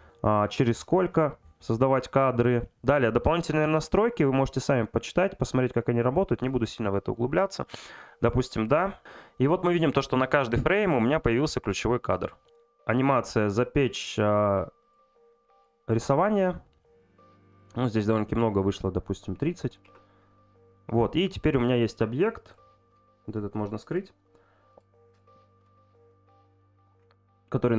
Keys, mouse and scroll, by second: 13.7-15.1 drag, 17.6 click, 18.9 click, 21.2 click, 23.9 click, 25.1 click.